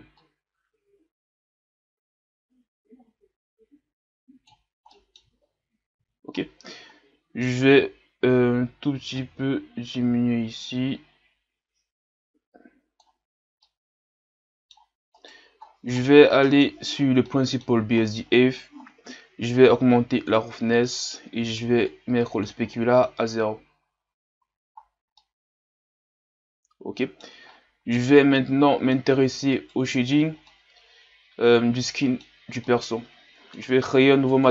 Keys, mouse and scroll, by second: 4.9 middle click, 5.3-6.4 scroll up 3, 6.4-7.0 scroll down 1, 7.0-7.7 scroll down 1, 7.7-8.6 scroll down 1, 8.6-9.3 scroll down 1, 9.3-13.6 drag, 13.6-15.2 middle drag, 15.2-19.7 right drag, 19.7-20.9 drag, 20.9-22.0 middle drag, 22.0 click, 22.7 middle click, 23.3-24.4 scroll, 24.4 a, 24.8-25.1 scroll down 1, 25.1-27.5 middle drag, 27.5-27.9 scroll up 7, 27.9-28.3 scroll down 2, 28.3-29.6 middle drag, 29.6 right click, 30.5-34.5 middle drag.